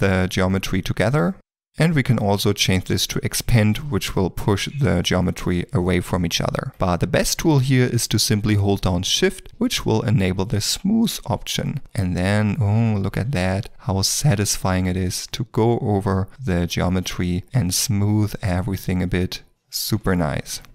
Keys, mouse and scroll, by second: 1.2 ctrl+z, 6.7 ctrl+z, 9.4 shift+l, 17.4 shift+middle click, 18.0 shift+click.